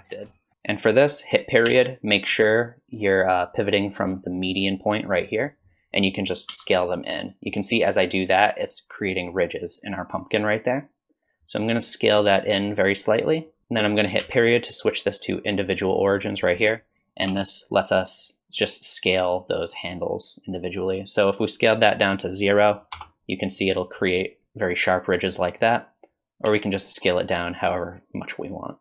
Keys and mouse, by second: 0.4 shift+click, 6.5 s, 17.3 s, 26.5 s.